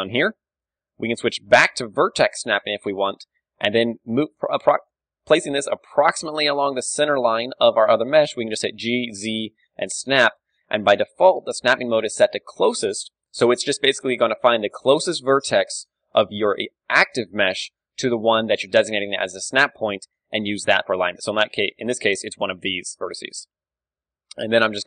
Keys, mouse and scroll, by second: 0.5-1.7 drag, 1.2 ctrl+shift+Tab, 1.7-2.7 middle drag, 3.8 g, 5.3-7.4 drag, 5.3 d, 7.0 d, 7.4-9.2 right drag, 8.7 d, 8.7 g, 10.7-15.4 drag, 18.0 g, 19.8-22.8 drag, 22.8-24.8 middle drag, 23.0 z, 24.3 g.